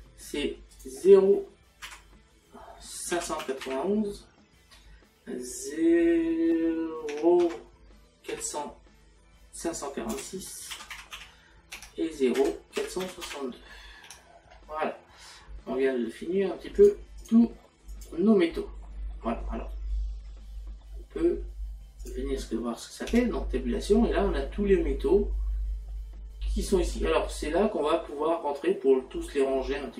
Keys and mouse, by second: 0.8 click, 1.9 KP_Decimal, 3.2 KP_5, 7.5 KP_Decimal, 10.2 BackSpace, 11.8 Tab, 12.4 KP_Decimal, 14.1 Tab, 16.8 click, 20.7 middle click, 22.1 click, 23.1 Tab.